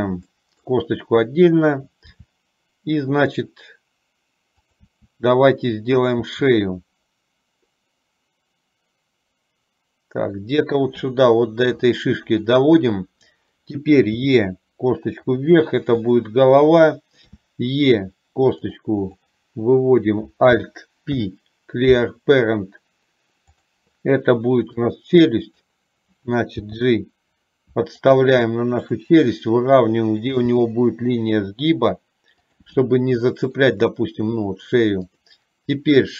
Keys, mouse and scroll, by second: 0.5 shift+middle click, 5.0 e, 12.2 shift+middle click, 17.5 e, 19.2 click, 21.2 alt+p, 25.0 click, 26.7 g, 30.5 g, 33.6 shift+middle click, 35.2 click.